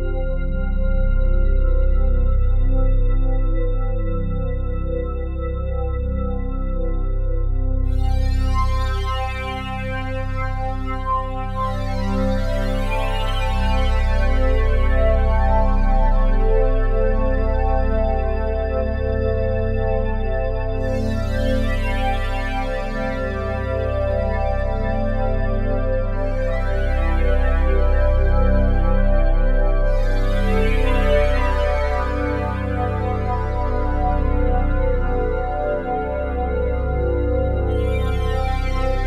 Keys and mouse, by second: 0.5-1.7 ctrl+alt+drag, 2.0 ctrl+alt+drag, 2.9 shift+click, 3.7-4.4 drag, 4.7 ctrl+alt+click, 6.7 click, 7.3 alt+click, 8.0 click, 8.4 click, 9.2 click, 9.7-11.4 drag, 12.0 g, 12.2 y, 15.4 click, 16.0 alt+click, 16.7 ctrl+alt+click, 19.4 alt+shift+click, 20.5 alt+click, 21.2 alt+click, 23.5 click, 24.1 alt+click, 25.0 shift+click, 25.6 shift+click, 27.3 ctrl+z, 27.8-29.1 drag, 29.3 alt+click, 29.8 ctrl+z, 30.7 shift+click, 31.4 click, 31.6 click, 32.5-34.6 alt+drag, 35.2 s, 35.5 z, 38.7 click.